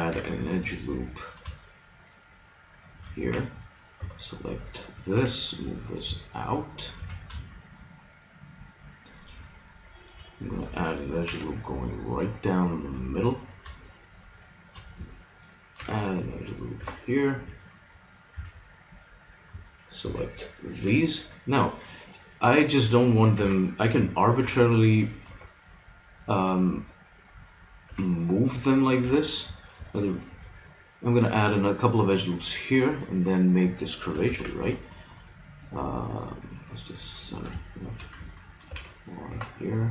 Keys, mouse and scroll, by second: 0.1 ctrl+r, 3.2 a, 4.0 b, 5.2 g, 7.0 a, 8.6-11.2 middle drag, 11.2 ctrl+r, 15.8 ctrl+r, 18.4 a, 20.1 b, 21.2 middle click, 23.1 middle click, 23.4 KP_3, 24.4 g, 27.8 g, 32.4-34.2 drag, 34.4 shift+s, 38.7 ctrl+r.